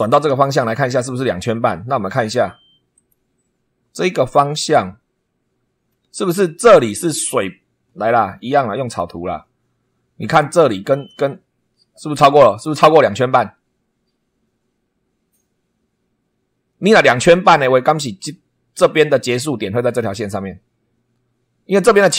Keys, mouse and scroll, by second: 2.9 click, 3.6 scroll up 1, 8.8 click.